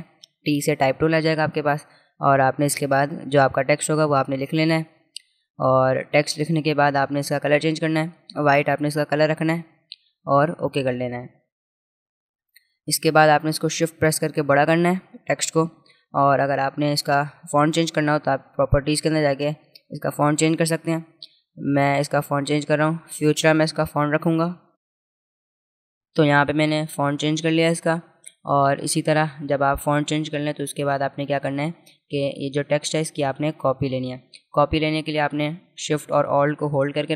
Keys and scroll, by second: 3.2-5.1 typing, 20.3-22.8 typing, 27.4 v.